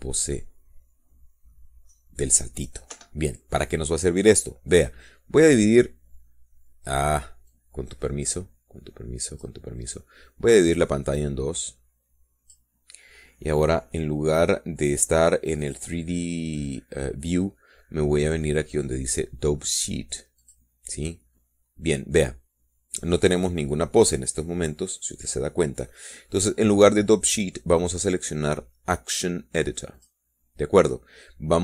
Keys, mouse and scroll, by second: 0.6 scroll up 2, 1.0 scroll down 2, 1.4 scroll up 2, 1.9 scroll down 2, 2.4 scroll up 2, 2.7 scroll down 2, 3.1 scroll up 2, 3.7 scroll down 2, 4.4 Escape, 9.0-11.1 drag, 12.2-14.2 drag, 17.1 click, 22.0 click, 29.3 click, 31.5 click.